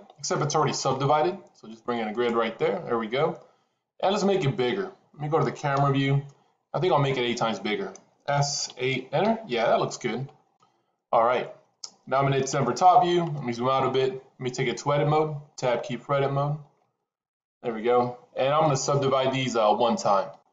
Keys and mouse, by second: 5.6 KP_0, 8.3 s, 12.4 KP_7, 16.7 Tab.